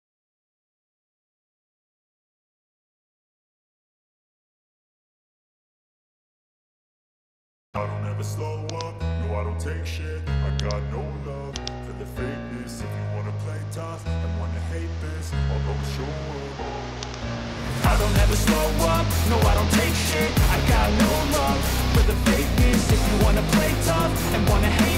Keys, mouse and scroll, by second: 2.2 click, 4.2-5.1 typing, 5.3 Return, 7.0-8.1 drag, 8.8-9.9 drag, 10.7 click, 13.8 1, 14.3 1, 14.7 Return, 17.1-18.2 drag, 18.4-19.5 drag, 20.2-21.4 drag, 22.4-23.6 drag.